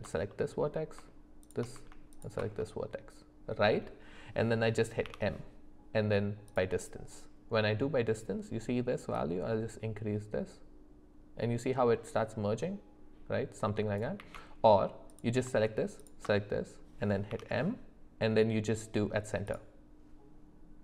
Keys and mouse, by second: 0.3 middle click, 2.1 ctrl+shift+click, 2.6-3.7 middle drag, 5.0 m, 9.2-14.0 drag, 14.2 ctrl+z, 15.2 click.